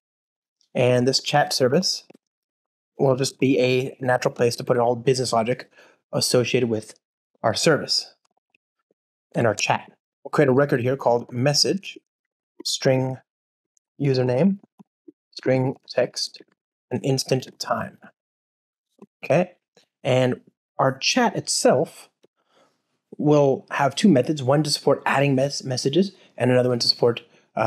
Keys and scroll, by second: 1.1 Return, 5.0 alt+BackSpace, 9.3 Return, 10.1 alt+BackSpace, 10.6 Return, 17.2 Return.